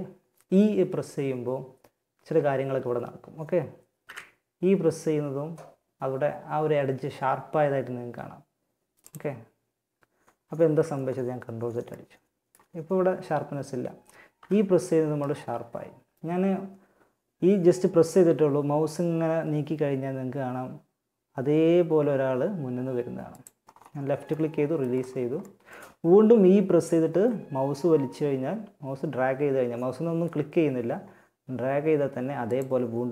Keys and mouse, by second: 3.2 e, 9.8 ctrl+z, 13.6 e, 23.6-24.6 middle drag, 26.4 e, 33.0 e.